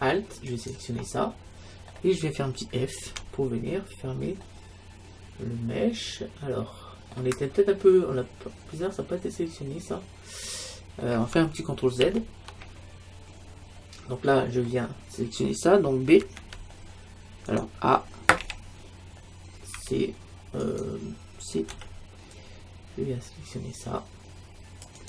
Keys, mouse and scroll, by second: 0.5-2.3 right drag, 2.3 middle click, 3.1 f, 4.5-6.3 middle drag, 7.5-8.9 middle drag, 8.9 scroll up 1, 9.0-10.3 middle drag, 10.9-12.1 middle drag, 12.1 ctrl+z, 14.2-16.2 middle drag, 16.4 b, 18.4 a, 21.8 c.